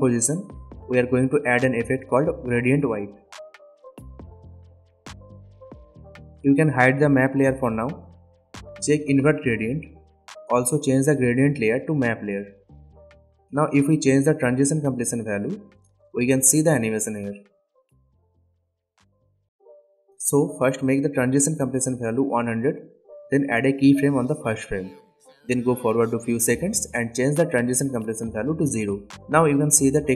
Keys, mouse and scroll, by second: 2.7-4.2 typing, 4.9-27.8 drag, 13.8 drag, 19.0-20.1 drag, 27.8 space, 29.4-30.1 click.